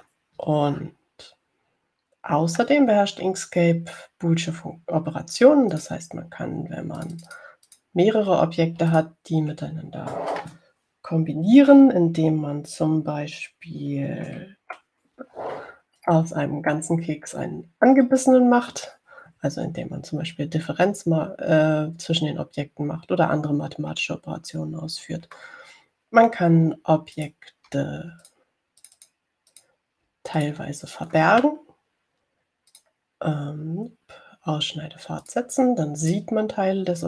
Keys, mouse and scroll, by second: 0.3 click, 7.0 click, 8.3 click, 9.0 click, 10.2 shift+click, 17.2 click, 25.3 ctrl+scroll down 2, 26.6 ctrl+click, 27.4 middle click, 28.4 click, 29.5 shift+click, 30.1 click, 30.8 click, 31.6 shift+click, 34.0 click, 36.5 click.